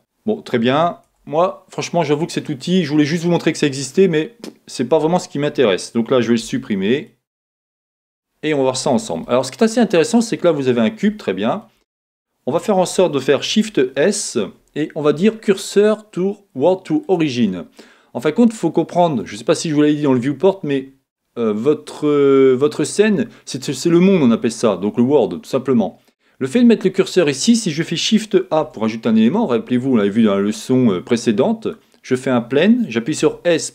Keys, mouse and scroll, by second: 0.0-33.7 middle drag, 6.4 x, 13.4 shift+s, 28.6 shift+a, 33.3 s.